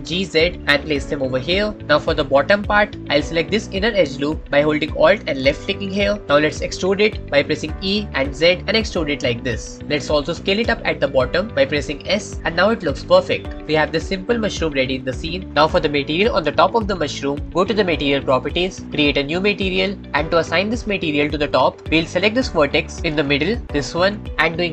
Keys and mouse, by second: 0.1 z, 5.7 alt+click, 7.6 e, 8.1 z, 9.8 click, 10.8 s, 12.9 click, 16.5 shift+middle click, 18.5 middle click, 21.3-22.4 middle drag, 23.1 shift+middle click, 23.9 middle click, 24.3 shift+middle click.